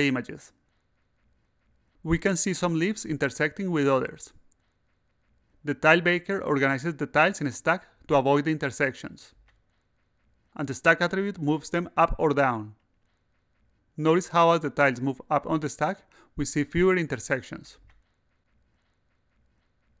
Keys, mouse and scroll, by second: 5.9 click, 7.0 click, 7.9 a, 9.6-11.3 drag, 11.6-12.6 drag, 12.8 click, 13.6 click, 14.8-18.6 drag, 18.7 click, 19.4 click.